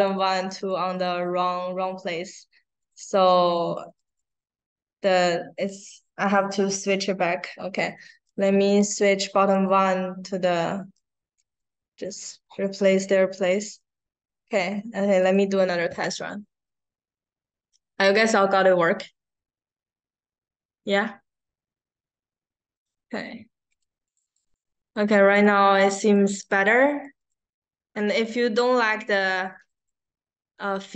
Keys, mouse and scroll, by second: 0.5 click, 0.9 click, 1.1 click, 1.7 click, 2.7 click, 3.0 click, 4.0 click, 4.9 click, 6.1 click, 8.2-9.4 drag, 10.9-12.1 drag, 15.1 click, 22.7 click, 24.6 click, 25.3 click, 26.4 click, 27.3 click, 29.3 click, 29.5 click, 29.7 click.